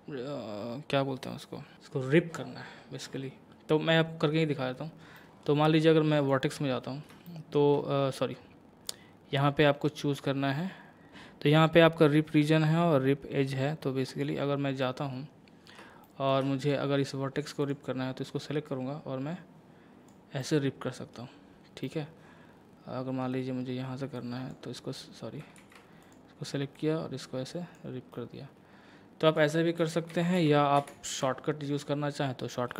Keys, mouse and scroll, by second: 5.2 middle click, 6.2 click, 6.8 scroll up 1, 7.3 shift+middle click, 8.9-14.8 drag, 14.8 middle click, 16.6-20.4 drag, 20.4-24.2 middle drag, 24.2-25.6 drag, 25.6 ctrl+z, 26.0-28.1 drag, 28.1-29.8 middle drag, 29.8 ctrl+z, 32.1 scroll up 1.